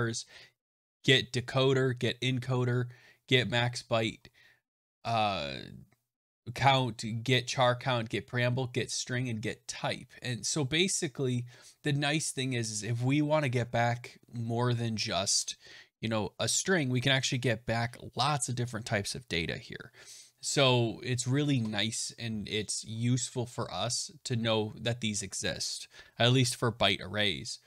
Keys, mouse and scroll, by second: 1.9 middle click, 3.4 middle click, 3.5 middle click, 3.7 middle click, 4.1 middle click, 4.1 middle click, 4.7 middle click, 4.8 middle click, 4.9 middle click, 9.9-10.6 scroll, 10.6-14.1 scroll, 22.8-23.7 scroll, 23.7-24.2 scroll, 26.2-27.6 scroll.